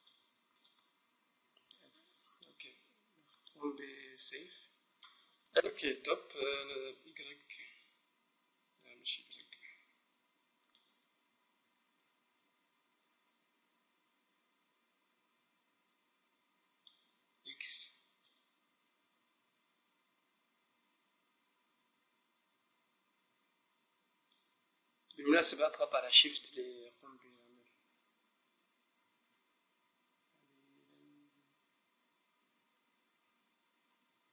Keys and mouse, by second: 1.8 f, 2.3 middle click, 2.4-3.4 middle drag, 3.4-5.1 drag, 5.1-7.1 middle drag, 7.1-8.8 drag, 10.6-12.3 drag, 12.3 middle click, 18.2-19.7 drag, 26.4-28.1 drag, 34.1-34.3 middle drag.